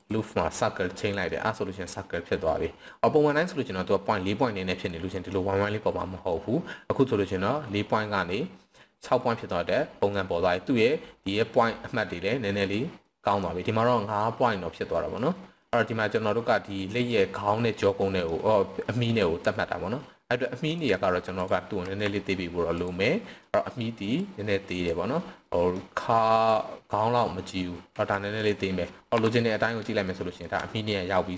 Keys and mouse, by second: 1.0 middle click, 2.5 middle click, 5.1 middle click, 6.0-7.0 middle drag, 7.6-7.9 middle drag, 9.8 middle click, 13.0 middle click, 14.9 middle click, 15.5 middle click, 16.2-17.1 middle drag, 17.6-18.3 middle drag, 20.6 click, 21.3 click, 21.8 s, 22.8 click, 23.0-23.4 middle drag, 24.2 click, 25.4 middle click, 26.5 click, 27.9 s, 28.3 drag, 29.1 KP_3, 30.1 shift+middle click.